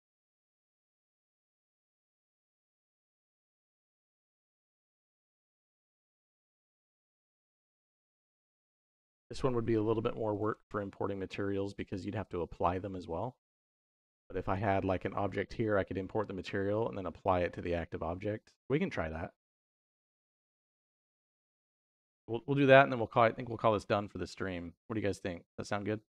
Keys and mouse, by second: 0.0 y, 1.4 click, 1.8 middle click, 2.6 click, 4.7-11.1 drag, 13.8 click, 14.3 click, 15.9-19.2 shift+middle drag.